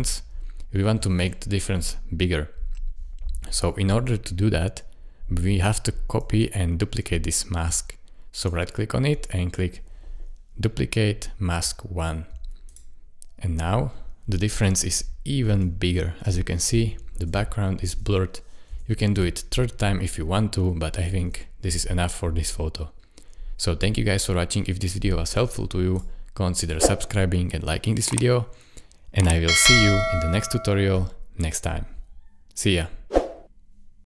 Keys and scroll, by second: 16.2 \, 17.3 \, 17.9 \, 18.7 \, 20.2 \, 21.2 \.